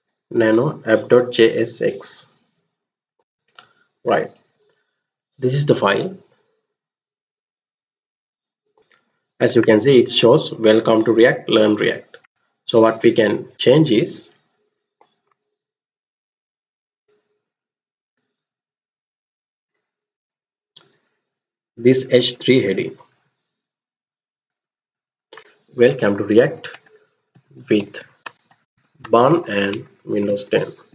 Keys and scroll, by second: 0.0 Up, 1.8-2.6 typing, 3.2 Return, 5.6-6.2 Down, 7.1 Down, 7.8 Down, 8.7 alt+Tab, 12.2 alt+Tab, 20.8 Up, 21.0 Up, 21.6 Right, 21.8 Right, 22.2 Right, 22.4 Right, 22.7 Right, 22.8 Right, 23.1 Right, 23.2-24.0 Right, 24.2 Right, 24.4 Right, 24.6 Right, 24.9 Right, 25.0 Right, 26.7-30.9 typing.